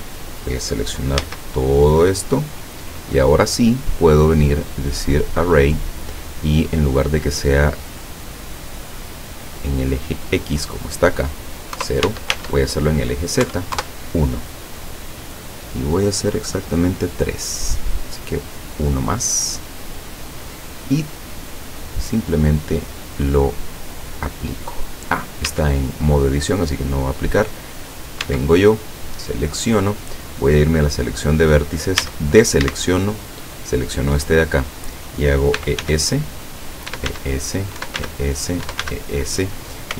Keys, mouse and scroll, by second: 1.3 a, 1.7-2.3 scroll down 2, 2.3-2.8 scroll up 2, 4.0 click, 5.2 click, 8.5-9.7 drag, 10.6 click, 11.8 KP_0, 12.1 Tab, 13.4 KP_1, 13.8 KP_Enter, 18.7 click, 20.1-20.6 scroll up 1, 20.7-21.0 scroll down 1, 24.1 click, 25.5 Tab, 26.9 click, 27.9 right click, 28.2 Tab, 28.8 middle click, 31.1 click, 31.5-32.0 scroll up 2, 32.0 a, 33.2 alt+shift+right click, 34.5-34.8 scroll down 2, 35.6-39.3 typing, 36.8 click, 37.7 click, 38.6 click, 39.4 click.